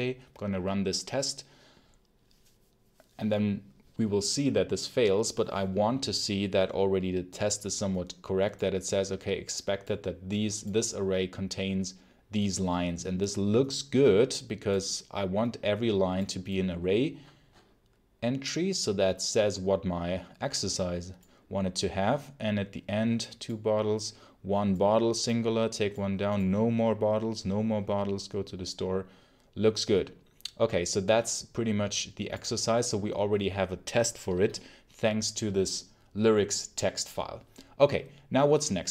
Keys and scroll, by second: 34.2 shift+Escape.